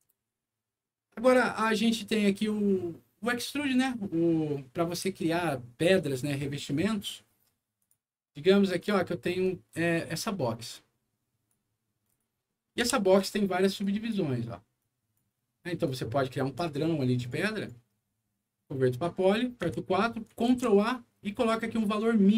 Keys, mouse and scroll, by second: 0.3 alt+middle click, 1.1 alt+middle click, 7.7 click, 8.7 click, 9.6 scroll down 1, 10.0 middle click, 10.6 click, 12.0 click, 12.4 middle click, 12.8 F4, 13.7 click, 14.7 click, 15.8 click, 17.1 right click, 17.5 right click, 18.9 click, 19.6 4, 20.4 ctrl+a, 21.9 ctrl+click.